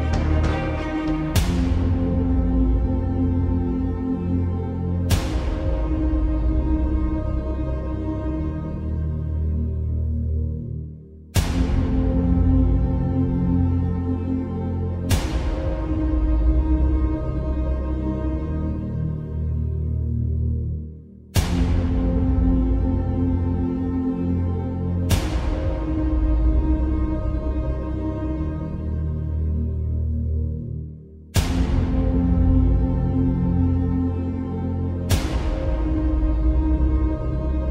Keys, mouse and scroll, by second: 10.3 x, 11.1 click, 13.3 click, 27.4 click, 31.2 ctrl+click, 32.0 right click, 35.0 click, 36.2 ctrl+g.